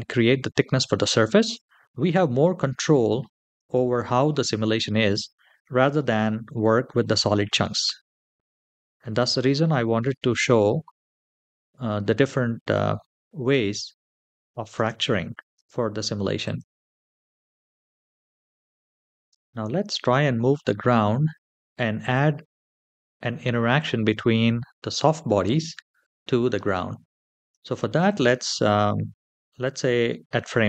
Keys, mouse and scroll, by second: 5.9-7.8 scroll up 2, 7.8-8.2 scroll down 2, 8.6-9.1 shift+middle drag, 14.3 click, 14.5 space, 15.5 space, 16.2 click, 16.8 space, 19.1 space, 26.9-27.3 scroll down 1, 27.5-27.9 shift+middle drag, 29.3 click.